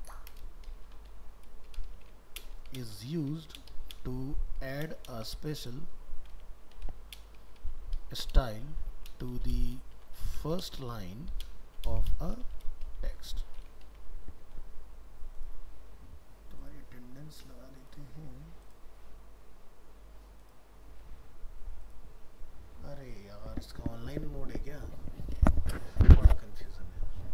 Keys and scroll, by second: 13.9 ctrl+s.